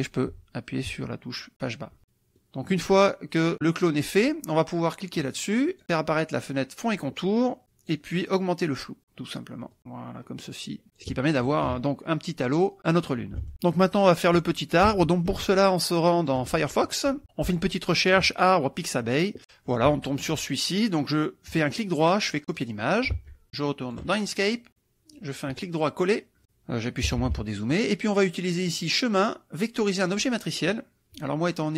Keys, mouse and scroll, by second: 0.3 Page_Up, 0.8 Page_Down, 2.0 click, 2.4 click, 5.7 click, 7.6 click, 8.8 click, 9.8-11.2 drag, 13.4 alt+Tab, 15.0 alt+Tab, 16.2 alt+click, 17.2 click, 21.5 click, 22.6 click, 23.2 alt+Tab, 23.8-25.4 alt+drag, 25.5 right click, 27.1 KP_Subtract, 28.7 click, 30.0 click.